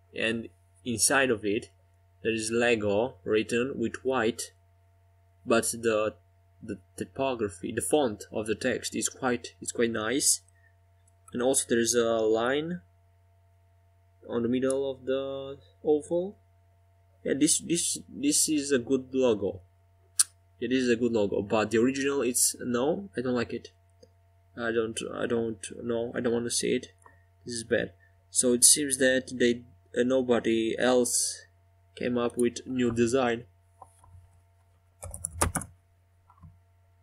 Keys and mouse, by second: 1.1 right click, 1.5 middle click, 2.3 middle click, 4.1-7.7 right drag, 7.7-13.3 middle drag, 13.3-15.3 drag, 16.1-17.8 middle drag, 19.1 a, 28.0 Tab.